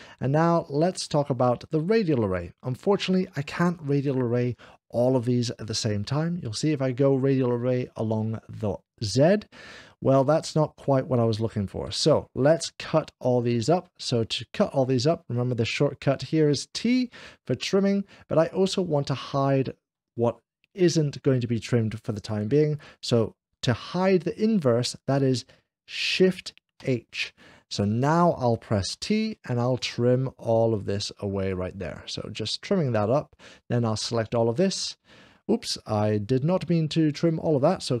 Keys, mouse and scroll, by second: 0.0-1.0 middle drag, 1.0 scroll down 1, 1.0 0, 1.8-2.9 shift+middle drag, 5.6 click, 9.0 click, 11.6 Escape, 11.8 Escape, 26.9 Escape, 26.9 shift+h, 29.0 t, 29.6-34.5 drag.